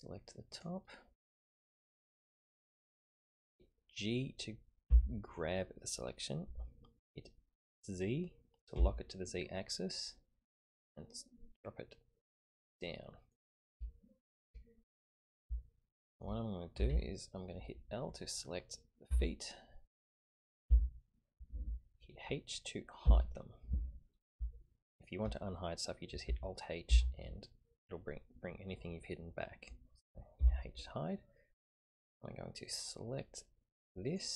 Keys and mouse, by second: 4.9 g, 13.9 shift+middle click, 15.6 shift+middle click, 16.7 a, 16.9 a, 19.1 l, 20.6 l, 23.0 h, 24.6 shift+middle click, 26.9 alt+h, 30.4 h, 32.7-34.3 drag.